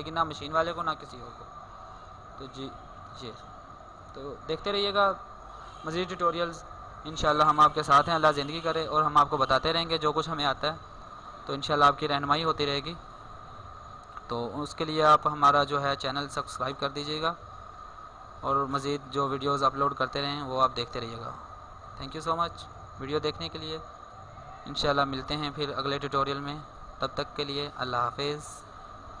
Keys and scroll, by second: 12.2-13.0 typing.